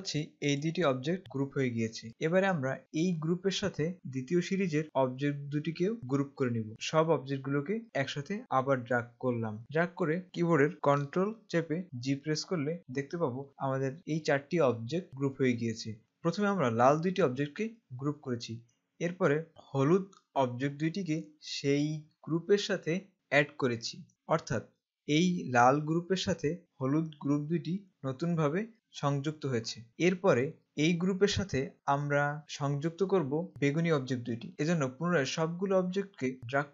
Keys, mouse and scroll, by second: 6.7 click, 12.3 ctrl+g, 30.6 click.